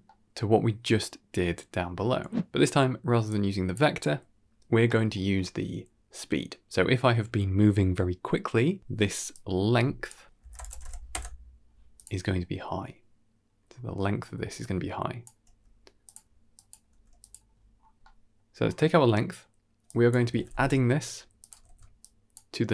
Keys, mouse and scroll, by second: 3.2 click, 4.7 middle click, 9.2-11.9 drag, 13.6-15.1 scroll down 4, 13.9 middle click, 14.5-15.1 drag, 15.3 g, 16.4 click, 16.8 g, 17.5-18.2 scroll up 3, 17.9 middle click, 18.4-19.1 scroll up 2, 18.8 middle click, 19.8-21.4 drag, 20.4 d, 21.6 alt+s, 21.9-22.3 drag.